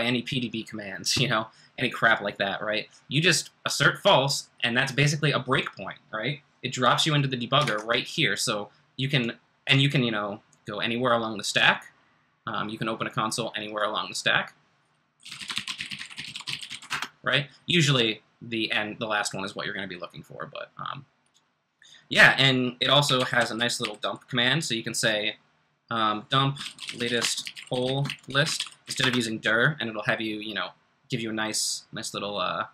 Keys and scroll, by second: 7.6 super+Tab, 15.0-17.1 typing, 19.9 typing, 22.8-24.3 typing, 26.3-29.5 typing.